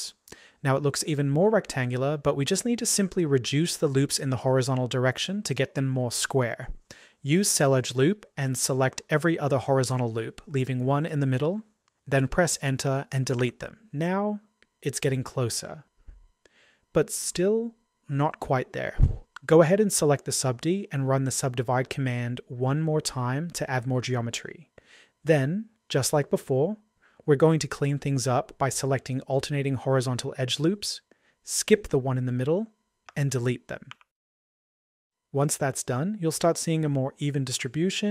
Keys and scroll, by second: 13.3 Delete, 34.1 Delete.